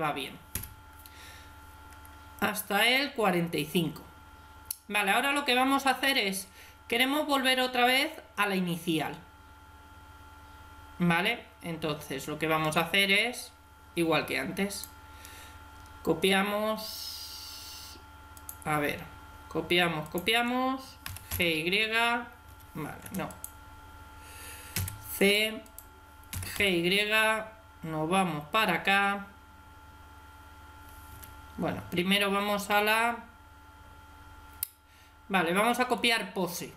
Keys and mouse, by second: 0.4 Escape, 14.6 right click, 18.2 right click, 20.9 g, 23.2 right click, 24.6 c, 25.6 right click, 26.2 g, 35.8 right click.